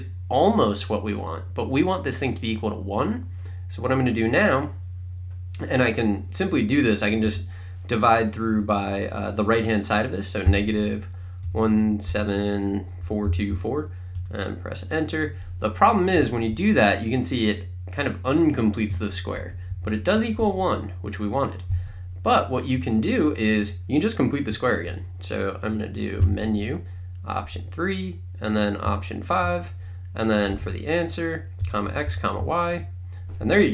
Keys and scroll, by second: 7.3 /, 10.5-14.1 typing, 14.2 Return, 19.4 Up, 19.7 Right, 26.2 Menu, 27.6 3, 28.9 5, 30.2-32.9 typing.